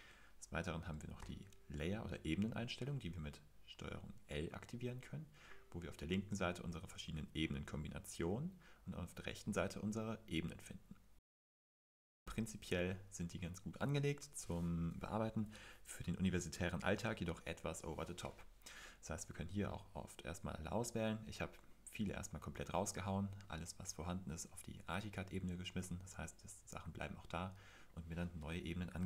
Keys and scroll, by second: 1.2 super+l.